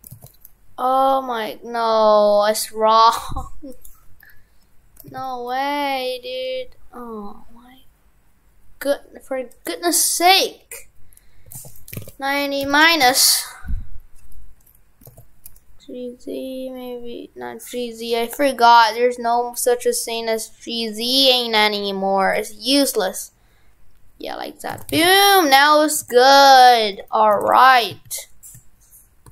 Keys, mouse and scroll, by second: 24.7 shift+f, 26.2 shift+f, 27.0 right click, 27.4 shift+f.